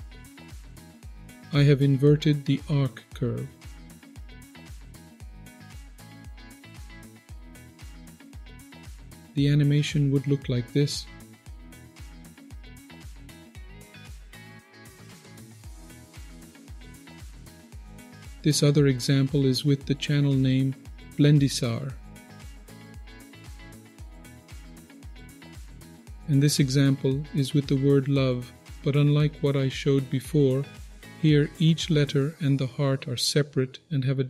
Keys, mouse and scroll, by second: 0.9-3.3 scroll up 7, 3.3 click, 3.3 scroll up 1, 3.9 click, 4.5-5.0 scroll down 2, 5.4-6.7 drag, 7.0 ctrl+z, 7.8-8.2 scroll down 2, 7.9 middle click, 8.8 click, 9.3 click, 16.6 click, 17.4 click, 18.0 click, 19.0-20.6 scroll down 2, 20.9-22.6 drag, 22.8-31.3 middle drag, 29.2 click, 31.9 KP_1.